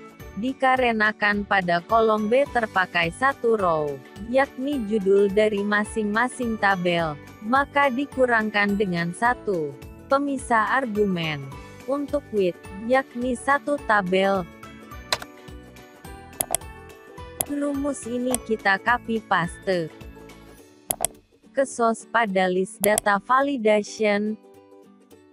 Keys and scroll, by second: 18.2 ctrl+x.